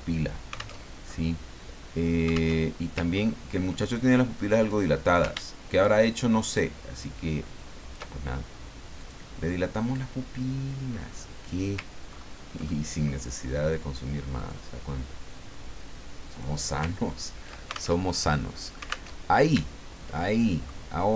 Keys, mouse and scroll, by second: 0.8 alt+Tab, 2.5 alt+Tab, 3.1 ctrl+scroll up 2, 4.6 click, 5.8-8.0 ctrl+shift+drag, 9.0 click, 9.9-11.6 drag, 12.1 ctrl+scroll up 2, 12.6 ctrl+click, 14.4-16.6 drag, 17.0-17.4 ctrl+scroll down 2, 18.0 ctrl+alt+Tab, 19.2 alt+Tab, 19.6-20.1 ctrl+scroll down 2, 20.1 ctrl+middle click.